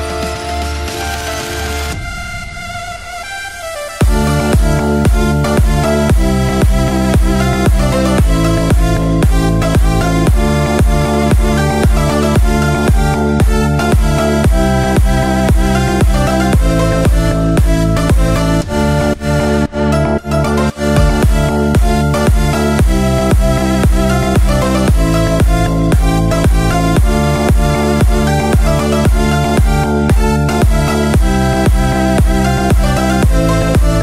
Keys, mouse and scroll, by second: 2.4 scroll down 1, 2.7-4.2 middle drag, 4.3 Tab, 4.7 click, 5.1-6.0 middle drag, 8.1 click, 9.4-9.9 drag, 10.8 click, 11.8 click, 14.7 click, 15.1 click, 16.1 click, 16.8 click, 17.9 click, 18.7 click, 19.3 click, 23.9 click, 24.8 click, 28.4 KP_1, 29.5-30.1 scroll up 3, 30.2-31.1 shift+middle drag, 32.8 click.